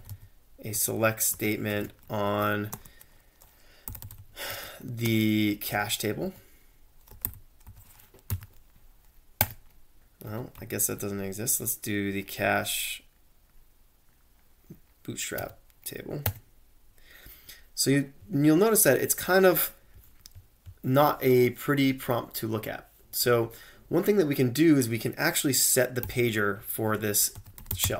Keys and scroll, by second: 0.0-10.3 typing, 0.8 Tab, 10.0 Up, 10.6 Tab, 15.4 Return, 16.2 Return, 26.0 typing, 27.1-27.9 typing.